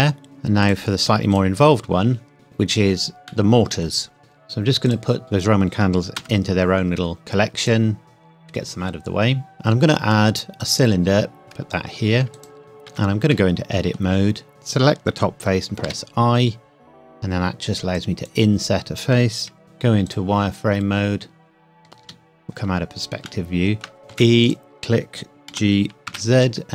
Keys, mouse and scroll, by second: 0.6 click, 3.3 middle click, 4.2 KP_1, 4.9 click, 6.2 m, 7.6 click, 8.0 KP_Enter, 9.2 scroll up 1, 9.5 shift+a, 11.4 g, 12.4 click, 12.9 Tab, 13.3 middle click, 14.5 Tab, 15.8 i, 18.0 click, 19.6 z, 20.1 click, 22.0 KP_5, 22.8-23.1 scroll down 1, 23.2 shift+middle click, 24.1 e, 24.4 click, 25.5 g, 26.1 z.